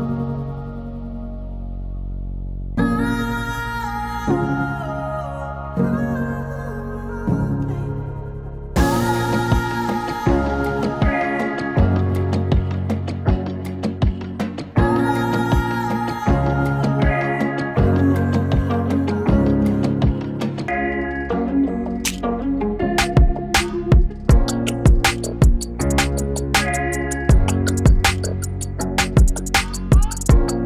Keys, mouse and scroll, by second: 5.7-16.4 drag, 16.4-26.1 drag, 26.6-30.6 drag.